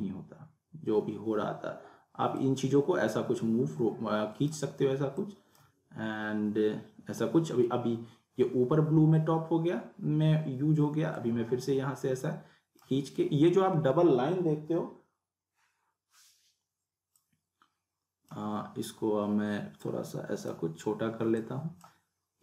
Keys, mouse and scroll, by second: 2.4-4.5 drag, 11.2-11.7 drag, 17.1-18.4 drag.